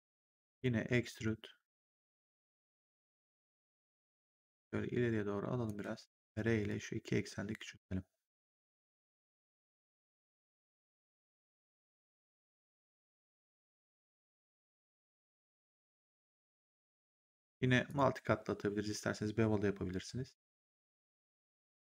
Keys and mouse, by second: 0.4 click, 3.1 w, 4.1 click, 5.7 r, 6.6 click, 10.6 w, 11.4 click, 12.8 right click, 17.8 click.